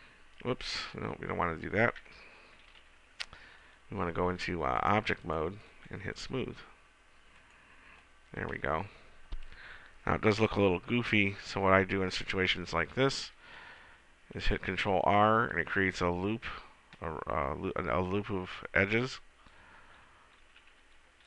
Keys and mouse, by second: 3.0 ctrl+z, 11.7 Tab, 14.5 ctrl+r, 19.3-20.8 drag, 20.8 ctrl+r.